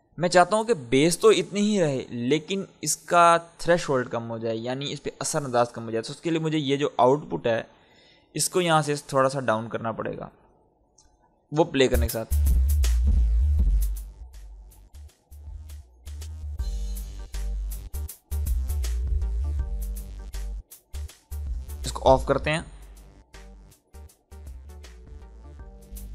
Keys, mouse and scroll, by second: 8.4 space, 8.7 ctrl+click, 11.8 space, 13.4-22.0 drag, 25.4 click.